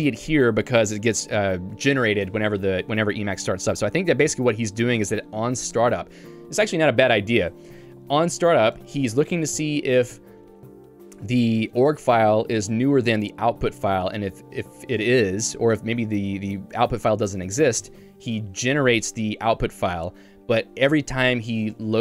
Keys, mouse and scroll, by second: 3.1-5.1 typing.